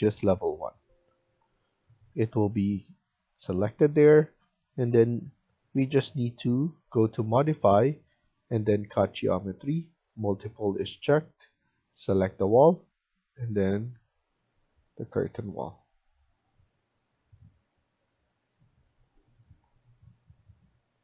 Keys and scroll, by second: 1.8 Escape, 2.0 Escape, 20.9 Escape.